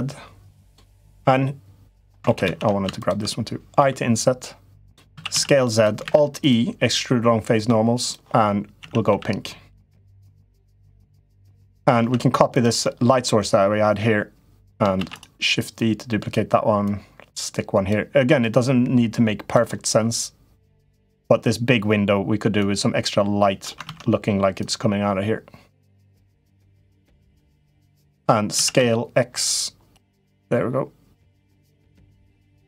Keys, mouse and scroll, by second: 0.6-1.9 middle drag, 2.0 ctrl+z, 2.2 ctrl+z, 2.7 shift+click, 3.6 i, 4.9 s, 5.8 alt+e, 8.5 a, 8.9 g, 11.2 middle click, 11.7 Tab, 12.6-14.5 middle drag, 14.8 shift+d, 15.5 click, 16.7 click, 18.1-19.3 drag, 19.6-21.0 middle drag, 22.3-23.5 drag, 23.7 ctrl+z, 24.4-25.9 drag, 26.3-27.4 drag, 27.7 middle click, 28.3 s.